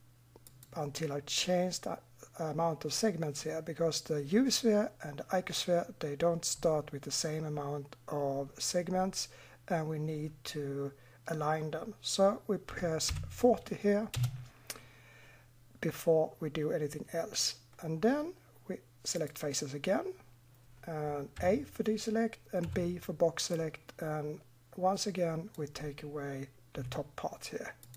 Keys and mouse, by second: 0.5-13.3 drag, 15.3 middle drag, 19.2 click, 21.4 a, 22.7 b, 26.7 Delete.